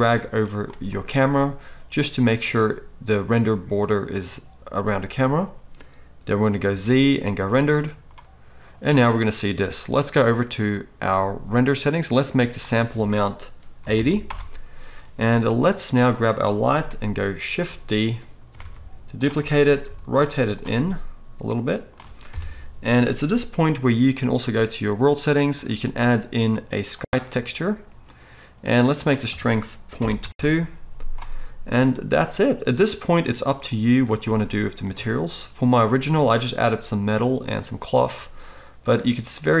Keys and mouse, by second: 3.3-21.1 middle drag, 6.7 z, 7.1-8.3 drag, 7.1-8.3 right drag, 16.9 click, 16.9 right click, 18.6 shift+d, 18.7 shift+click, 18.7 shift+right click, 19.8 r, 21.1-24.4 right drag, 22.3 KP_0, 24.4 middle click, 24.5-25.5 right drag, 25.5-33.7 middle drag, 33.7-39.6 right drag, 34.0 z.